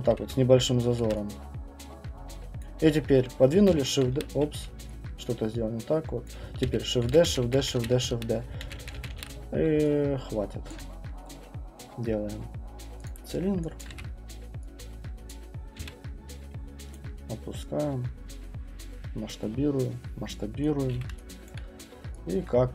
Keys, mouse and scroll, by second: 0.0-0.2 typing, 1.0 ctrl+d, 2.6 click, 3.8 shift+d, 6.2 click, 6.6-9.1 typing, 9.5-10.7 scroll, 10.7 alt+click, 13.0 click, 13.8 middle click, 13.8 alt+click, 13.9 w, 15.3 click, 15.8 r, 16.9 click, 18.8 click, 19.8 click, 20.8 click, 20.9 w, 21.5 alt+right click, 22.3 alt+click.